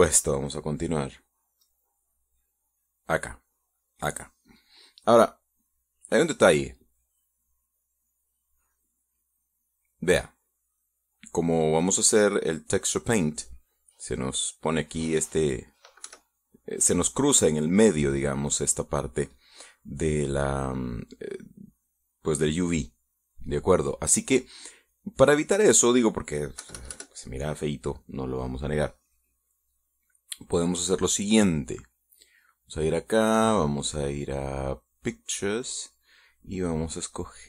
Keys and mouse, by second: 2.1 click, 3.2 click, 6.4 click, 7.5 click, 8.4 click, 9.4 click, 10.6-12.4 middle drag, 15.6 middle click, 16.7 KP_Subtract, 17.4-20.2 middle drag, 24.2 click, 25.5 click, 26.4 middle click, 27.3 KP_Subtract, 31.1 click, 33.0 click, 35.7 click.